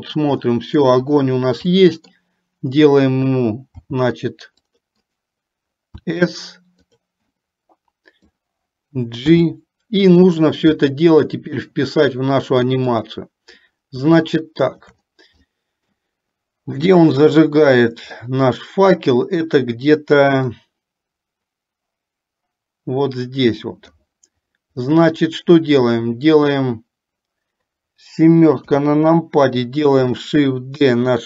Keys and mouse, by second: 0.6 middle click, 1.9 middle click, 4.6 c, 6.1 s, 7.5-8.5 middle drag, 9.4 g, 11.0 middle click, 13.0 click, 14.5 shift+middle click, 15.6 middle click, 17.0 click, 18.5 middle click, 20.6-24.1 drag, 25.0-26.1 middle drag, 30.0 KP_7.